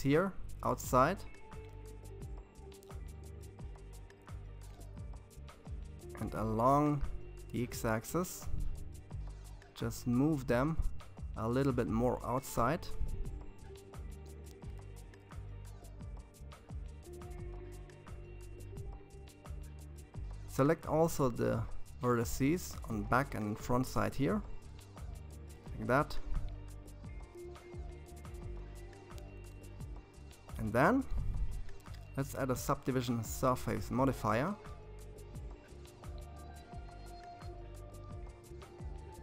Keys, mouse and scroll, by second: 4.0 g, 7.8-10.9 middle drag, 11.2 click, 11.7-13.8 middle drag, 13.8 ctrl+z, 15.5 ctrl+z, 17.4 shift+click, 19.0 shift+click, 20.6 ctrl+KP_1, 22.5 g, 25.1-28.4 middle drag, 30.0-33.3 drag, 33.6-36.8 middle drag.